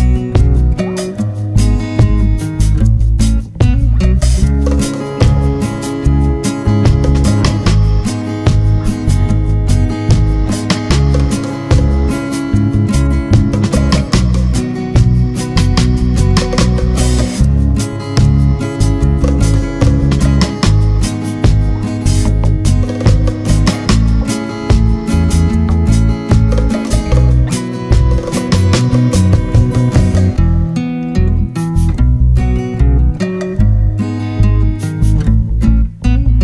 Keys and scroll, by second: 29.7 ctrl+z.